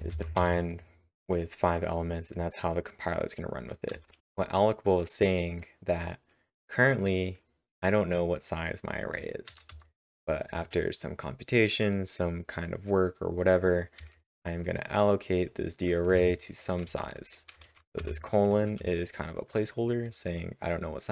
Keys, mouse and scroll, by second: 0.0-0.4 typing, 3.9 typing, 9.3-10.0 typing, 13.8-14.5 typing, 16.1-17.6 typing, 18.8 h.